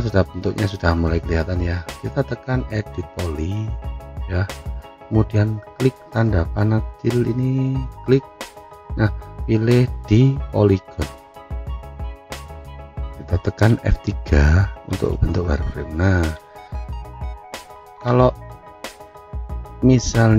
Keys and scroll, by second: 16.0 F3.